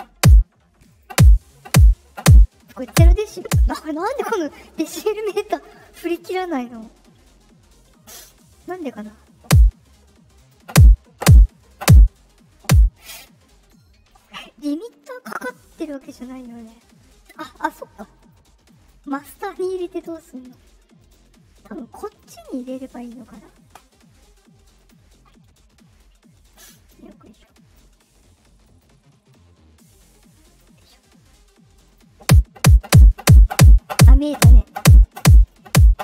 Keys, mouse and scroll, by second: 0.8 click, 10.3 click, 14.0 click, 18.1 click, 18.6 click, 19.9 click, 20.9 click, 22.0 click, 24.7 click, 26.4-27.7 drag, 28.6 click, 29.2-30.5 drag, 31.8 click.